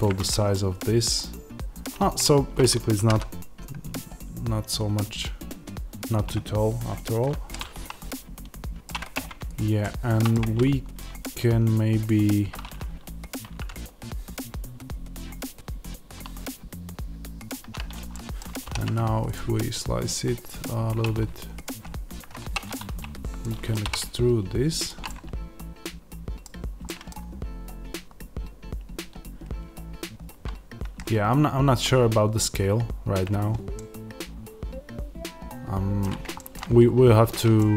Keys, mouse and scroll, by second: 2.9 g, 6.0 click, 7.5-9.4 middle drag, 9.0 Tab, 9.4 click, 9.7-11.1 middle drag, 10.3 Tab, 11.1 click, 13.2-17.4 drag, 13.2 g, 18.0-20.5 middle drag, 18.5 ctrl+r, 20.5 click, 22.3 3, 22.5 click, 23.3-24.7 middle drag, 23.7 e, 24.7 ctrl+click, 25.4 middle click, 26.3-26.7 scroll down 1, 31.0-31.8 scroll up 1, 32.3-33.6 scroll down 1, 33.6 middle click, 36.3 shift+middle click, 36.7-37.4 scroll up 1, 37.5 shift+middle click.